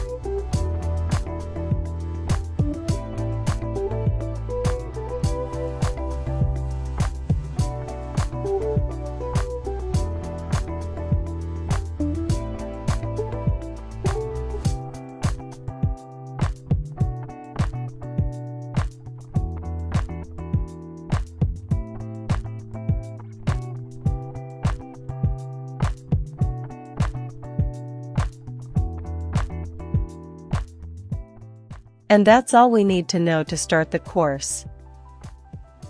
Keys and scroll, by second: 0.0-3.5 typing, 5.9 Return, 13.5 Page_Down, 15.2-17.9 typing, 19.5-20.2 typing, 21.0 Return, 26.6-27.6 typing, 28.5 shift+Escape, 28.9 typing, 30.0 Return, 30.5 typing.